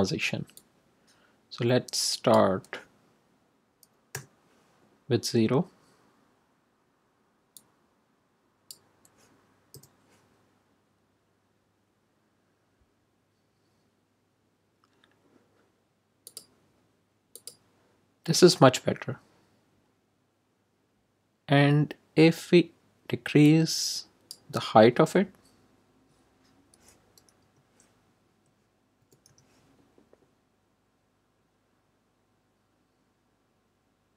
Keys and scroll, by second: 4.1 0, 9.6 0, 27.3 BackSpace, 28.2 Right, 28.9 BackSpace, 29.2 5.